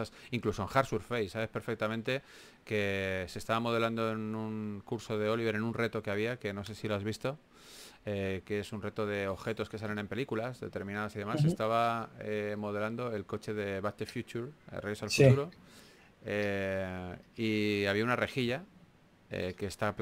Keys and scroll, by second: 1.0-2.6 typing, 6.5 3, 15.0 s, 18.9-20.0 typing.